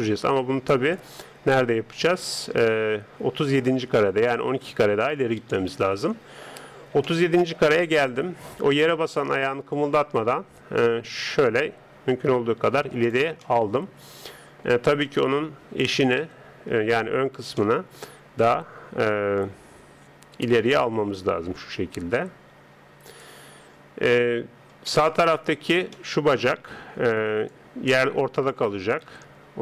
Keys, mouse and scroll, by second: 3.5 click, 7.0-9.8 middle drag, 9.8 click, 13.4-15.0 middle drag, 15.0 right click, 16.2 KP_3, 21.0 g, 24.9-28.6 middle drag, 27.4 d, 27.5 click, 28.6 d, 29.0 KP_3.